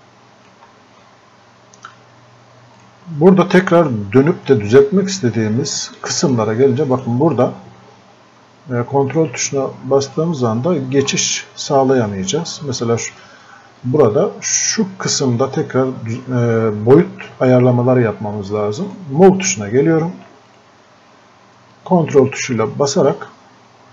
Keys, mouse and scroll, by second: 7.0 click, 10.1 ctrl+click, 13.9 click, 18.9 click.